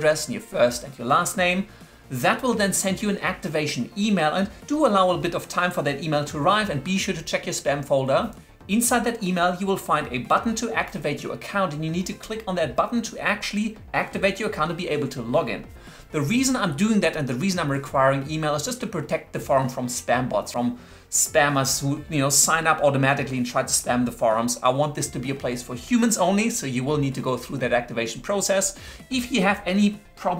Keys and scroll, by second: 0.2 shift+1, 0.3 Tab.